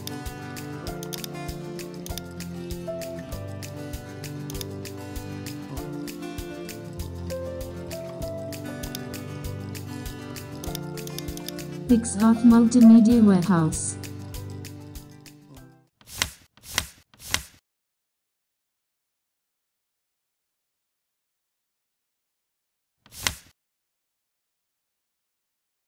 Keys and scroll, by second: 5.0 super+], 5.5 super+], 9.2 super+0.